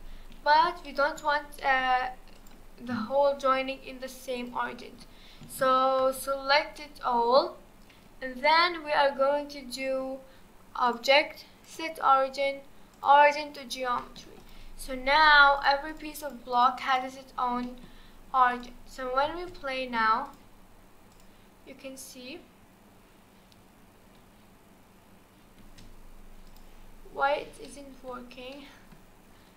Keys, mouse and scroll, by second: 2.4 click, 2.9 s, 4.8-6.0 middle drag, 6.0 ctrl+z, 6.8-10.9 middle drag, 10.9-13.7 drag, 13.7 scroll down 2, 14.0-14.4 middle drag, 14.4 click, 14.7-15.2 scroll up 2, 15.2 click, 15.6 click, 15.9 click, 16.2 click, 16.5 click, 16.9 click, 17.2-17.6 scroll down 4, 17.6 middle click, 18.1 scroll up 1, 18.5 click, 18.9-19.2 scroll down 2, 19.2 space, 20.3 click, 21.2 click, 25.6 space, 26.5-27.0 drag, 27.0-27.5 scroll up 4, 27.7-28.4 middle drag, 28.4 scroll down 1, 28.5-29.5 middle drag.